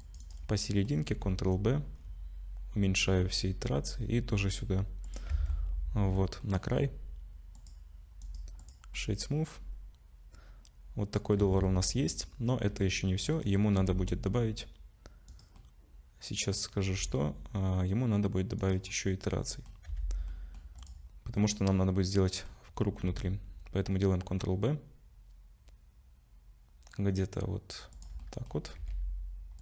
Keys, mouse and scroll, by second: 0.5 middle click, 1.1 ctrl+b, 5.3 Tab, 5.5 middle click, 6.4 middle click, 7.6 click, 8.2 right click, 8.9 middle click, 11.4 Tab, 11.7 middle click, 13.1 middle click, 13.7 ctrl+r, 15.6 middle click, 17.0 ctrl+r, 18.9 middle click, 19.9 2, 20.3 middle click, 20.8 click, 21.4 middle click, 22.9 ctrl+b, 28.2 middle click, 28.8 ctrl+r.